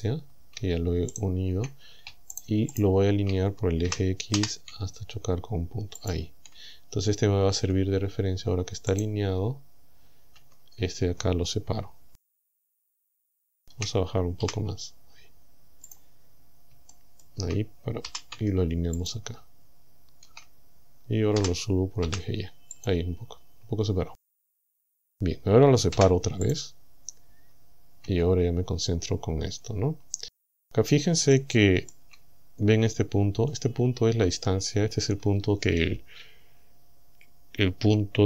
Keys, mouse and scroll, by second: 1.2 shift+right click, 2.4 shift+right click, 2.8 shift+right click, 3.9 g, 4.4 x, 6.0 ctrl+click, 7.6 Tab, 8.9 right click, 10.4 Tab, 12.6-13.0 scroll up 2, 13.3 shift+middle click, 14.5 g, 15.9 click, 16.3 scroll up 2, 16.9 shift+middle click, 18.1 g, 19.0 ctrl+click, 21.4 g, 22.1 y, 22.8 click, 23.2 scroll down 2, 26.0 p, 26.5 click, 28.1 Tab, 31.3 shift+middle click.